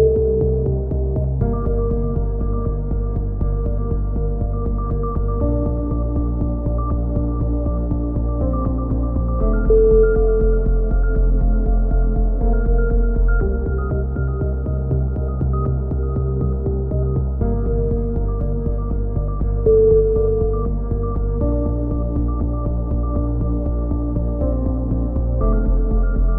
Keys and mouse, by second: 1.3-2.5 drag, 2.2 alt+m, 3.2 KP_7, 4.7 a, 5.2 click, 5.8 c, 5.9 middle click, 6.7 click, 9.0 click, 10.2-11.2 drag, 12.4 a, 12.5 click, 15.0 z, 16.3 click, 16.7 click, 17.2 middle click, 17.4 click, 18.6 click, 19.2 right click, 20.0 right click, 20.9-21.9 middle drag, 21.1 KP_7, 21.9 e, 22.7 click, 23.2 s.